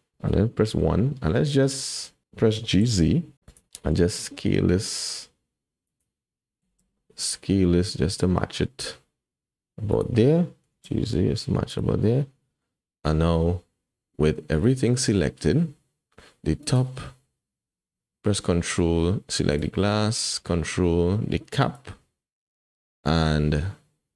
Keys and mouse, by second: 0.7 KP_1, 1.8 shift+middle click, 2.5 g, 3.9 s, 6.6 s, 10.6 g, 12.0-12.6 drag, 16.7 click, 21.6 ctrl+click.